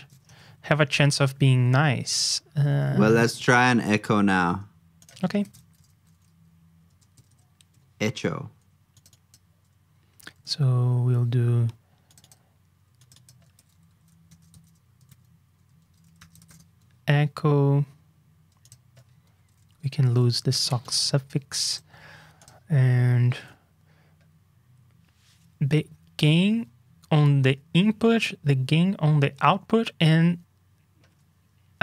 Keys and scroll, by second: 5.2 super+f, 10.6 super+Tab, 13.5 super+d, 15.0 super+z, 15.8 super+d, 19.3 super+d, 23.3 super+Tab.